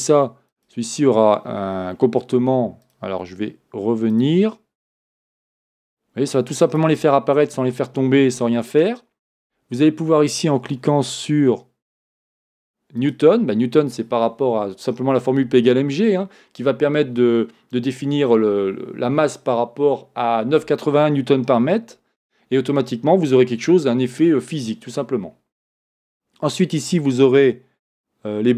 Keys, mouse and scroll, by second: 4.1-8.3 drag, 12.0-28.5 drag.